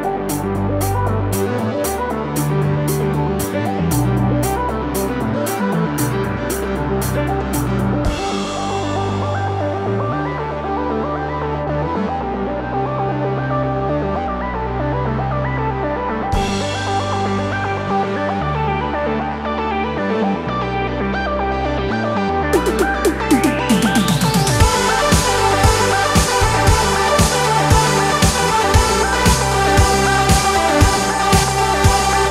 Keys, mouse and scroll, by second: 2.4-17.0 drag, 17.2-27.6 drag, 29.8-32.3 alt+drag.